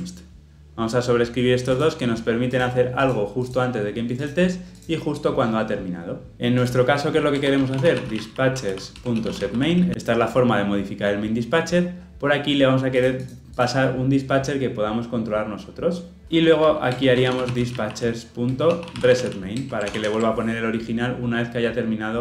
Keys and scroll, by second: 9.0 Return, 9.9 ctrl+p, 18.5 Return, 19.9 ctrl+alt+l, 20.0 ctrl+alt+o.